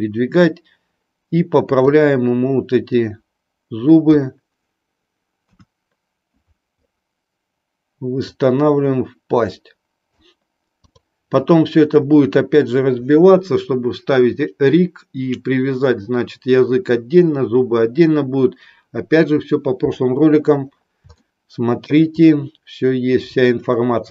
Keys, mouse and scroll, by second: 3.0-4.1 drag, 5.3 KP_1, 8.2-10.1 drag, 10.8 click, 21.2-21.7 shift+middle drag.